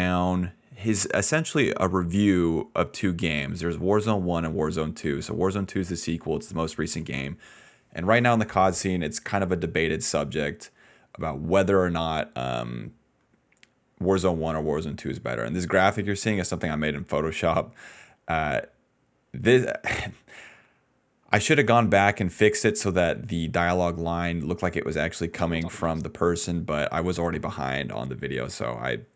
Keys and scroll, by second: 10.6 ctrl+z, 10.8 ctrl+z, 11.5 ctrl+z, 25.3 space, 25.9 space, 27.3 space, 27.7 space.